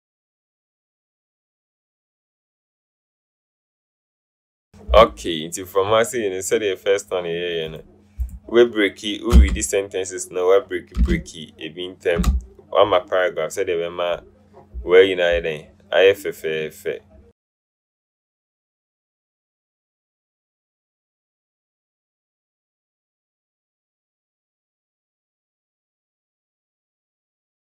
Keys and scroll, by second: 0.1 Up, 0.3 Up, 4.0 alt+Right, 9.7 Return, 12.3 Return, 19.6 Return, 20.0 Return, 22.9 ctrl+a, 24.1 Up, 24.7 Up, 25.7 alt+Up, 27.1 Up.